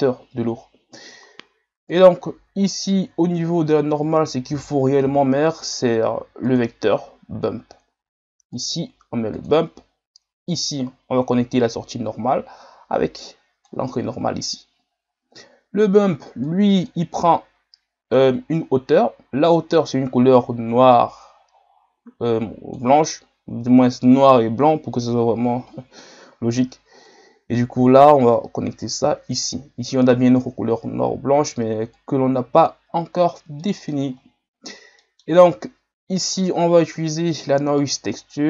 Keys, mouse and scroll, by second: 16.4 click, 18.6-22.9 drag, 27.2 click, 32.0-38.4 drag.